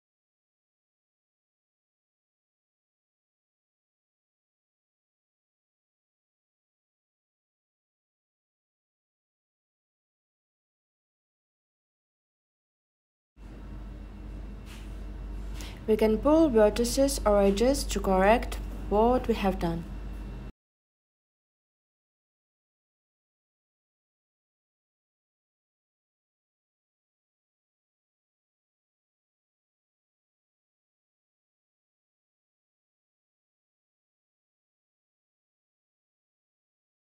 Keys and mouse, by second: 0.2 click, 0.2 middle click, 6.0 Tab, 6.5 click, 8.5 middle click, 9.3-10.5 middle drag, 10.8 middle click, 20.0 Tab, 21.1 click, 24.0 click, 29.2-29.6 drag, 34.0 shift+click, 34.7-35.1 drag.